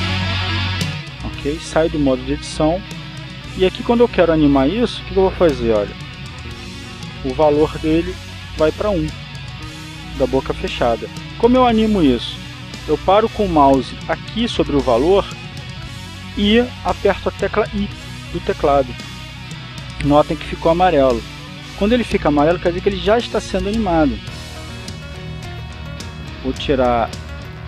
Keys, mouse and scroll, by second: 0.4 click, 0.8-1.6 scroll down 1, 3.6 Tab, 6.1 click, 7.8-12.4 drag, 13.0-13.8 drag, 14.4 click, 20.0 i, 25.6 click, 27.1 click.